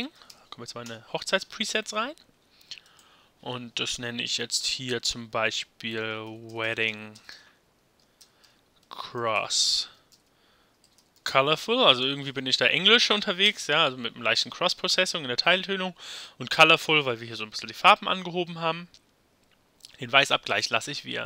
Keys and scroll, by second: 0.0-0.8 typing, 0.8 Return, 5.7-13.5 typing.